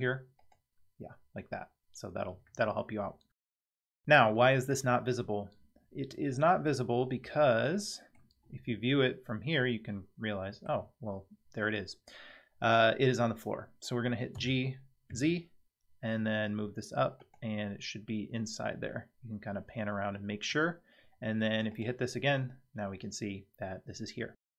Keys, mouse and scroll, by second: 0.4 click, 7.7-8.2 middle drag, 8.4 scroll down 6, 9.0-10.7 middle drag, 14.4 g, 17.6-20.5 middle drag, 21.7 click.